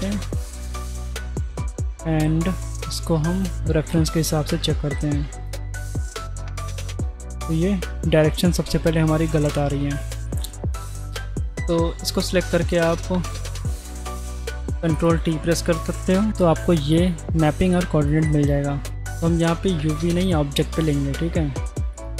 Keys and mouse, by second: 0.1-0.8 drag, 3.4 click, 7.7 middle click, 9.4 click, 10.4 drag, 10.7 click, 14.0 click, 14.4 shift+a, 15.0 click, 16.3 ctrl+t, 17.7-18.1 drag, 18.5 click, 19.8 click, 21.2 drag, 22.0 click.